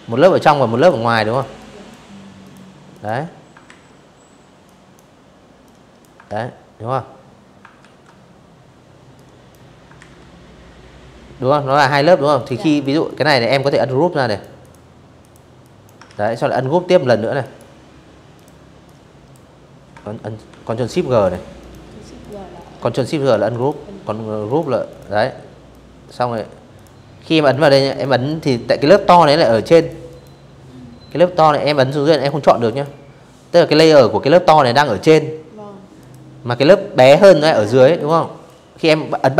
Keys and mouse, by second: 0.1 click, 0.6 click, 1.4 ctrl+z, 2.3 click, 3.3 click, 4.0 ctrl+z, 5.4 ctrl+w, 6.8 click, 7.6 ctrl+z, 9.3 right click, 10.0 click, 10.4 click, 10.7 click, 11.1 right click, 12.0 click, 12.3 click, 12.9 click, 13.3 click, 13.7 ctrl+z, 13.9 click, 14.2 click, 15.1 right click, 16.0 click, 16.5 click, 18.2 ctrl+shift+g, 18.9 click, 19.3 click, 19.9 click, 20.2 click, 21.0 ctrl+z, 21.2 click, 22.1 click, 22.6 click, 23.4 click, 24.4 click, 25.2 click, 25.6 click, 25.9 click, 27.4 click, 27.8 click, 29.4 click, 29.8 click, 30.3 click, 31.5 click, 33.7 click, 35.6 click, 36.1-37.1 drag, 38.9 click.